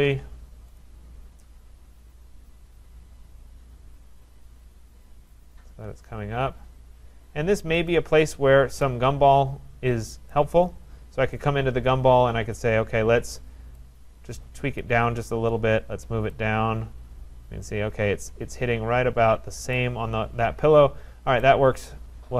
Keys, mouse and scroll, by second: 0.8 click, 7.9 click, 8.4-9.7 scroll, 10.3 right click, 11.5 click, 12.0 scroll, 14.8 click, 19.7 click, 20.7-21.5 scroll.